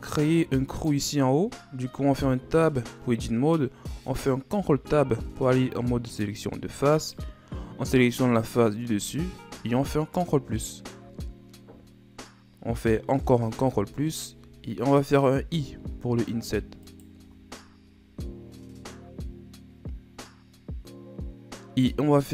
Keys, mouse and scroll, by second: 0.4-0.7 scroll up 4, 0.7 right click, 2.4 Tab, 4.6 ctrl+Tab, 7.0 right click, 8.3-10.2 middle drag, 10.2 KP_Add, 13.6 KP_Add, 15.7 i.